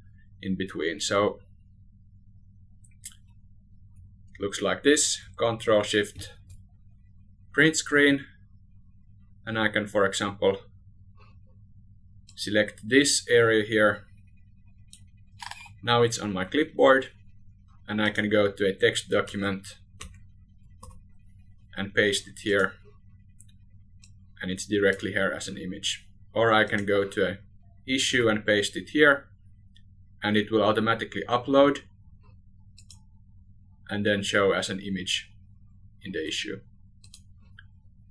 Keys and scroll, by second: 4.4 ctrl+shift+Print, 17.5 ctrl+a, 19.1 ctrl+v, 26.4 ctrl+v, 36.6 ctrl+a.